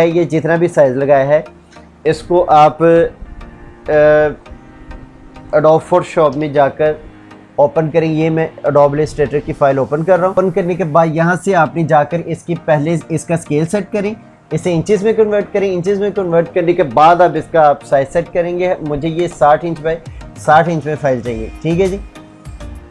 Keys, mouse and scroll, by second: 2.5 Return, 3.2 alt+Tab, 5.6 ctrl+o, 9.1 click, 14.5 click.